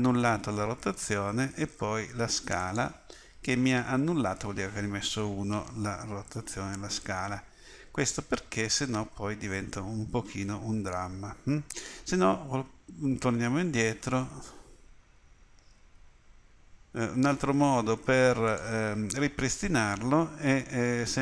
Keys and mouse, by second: 2.9-7.2 middle drag, 7.4-12.2 middle drag, 12.5 ctrl+z, 12.9 ctrl+z, 13.9 ctrl+z, 15.8 ctrl+z, 17.4 s.